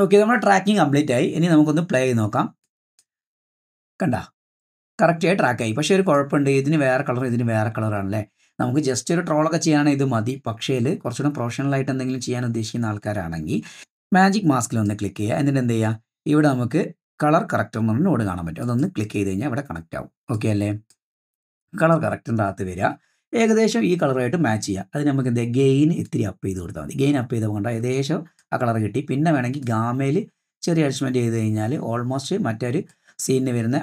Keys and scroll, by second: 3.1 space, 7.6 space.